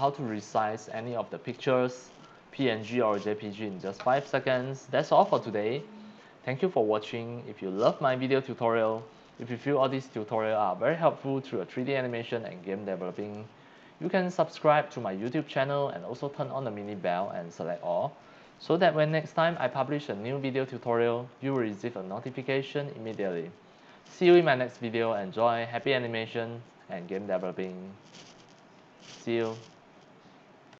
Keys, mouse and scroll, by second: 28.2 middle click, 30.7 click.